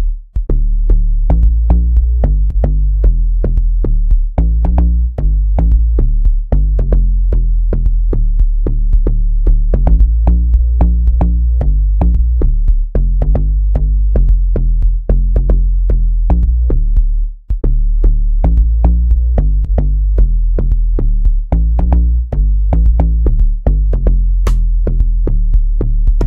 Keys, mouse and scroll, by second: 2.5 click, 6.5-7.5 drag, 11.9 click, 16.0 right click, 16.3 F5, 21.8 click.